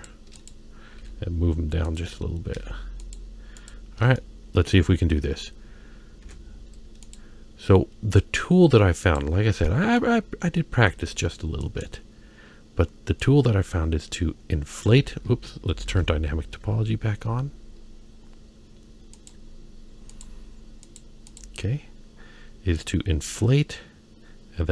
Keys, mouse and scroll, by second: 0.3 click, 0.9 g, 2.6 g, 3.6 click, 4.1-4.7 shift+middle drag, 5.0-5.6 scroll up 2, 6.2 ctrl+Tab, 9.0 click, 9.6 middle click, 10.2-10.7 scroll up 2, 10.7 f, 13.2-14.9 drag, 15.9 ctrl+z, 16.7-17.7 scroll down 4, 17.7-18.2 scroll up 2, 18.2-18.9 scroll down 1, 19.2-20.2 drag, 20.2 typing, 20.8 click, 21.8-22.3 scroll up 3, 22.7-24.7 drag.